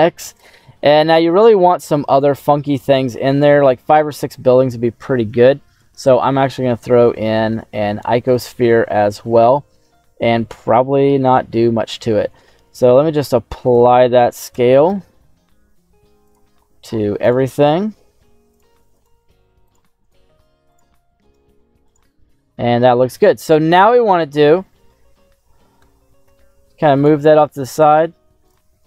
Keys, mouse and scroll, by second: 0.3 click, 0.8 scroll up 1, 0.9 middle click, 1.5-2.0 scroll up 2, 2.0 shift+middle click, 3.4 shift+a, 6.6 s, 8.2 click, 8.6 shift+middle click, 9.2-11.2 middle drag, 12.8 ctrl+a, 14.4 g, 14.8 x, 16.2 click, 17.1 right click, 17.9 ctrl+a, 18.9 right click, 19.2 ctrl+a, 20.0 right click, 20.2 ctrl+a, 21.1 right click, 21.4 ctrl+a, 22.6-23.0 scroll down 2, 23.4-24.0 scroll down 1, 24.0 click, 25.7 g, 26.2 x, 26.9 click, 28.4 alt+h, 28.4 right click.